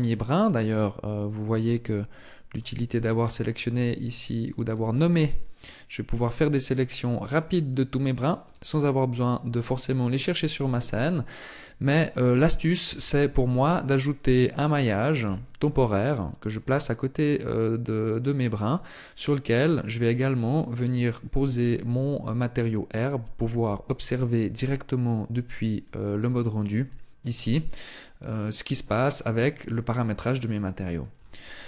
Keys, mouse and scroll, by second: 1.9 click, 2.9 click, 10.0 right click, 12.5 shift+a, 18.6 click, 26.3 click, 28.3-29.0 scroll up 2, 29.4 scroll up 1, 29.6 shift+middle click.